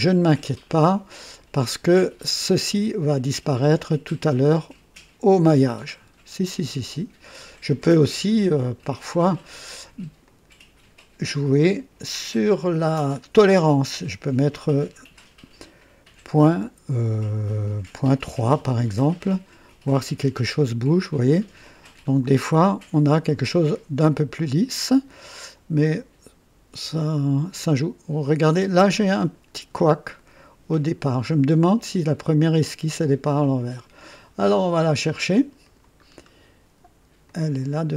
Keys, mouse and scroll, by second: 3.8-7.4 drag, 10.2 click, 12.1 click, 16.4 ,, 18.3 KP_3, 18.5 KP_Enter, 21.1-21.9 drag, 22.2 click, 23.4-25.0 drag, 25.4-28.9 drag, 29.2 scroll up 1, 29.7 right click, 35.6 click, 36.0-36.3 scroll down 1, 37.2 click, 37.8 scroll down 2.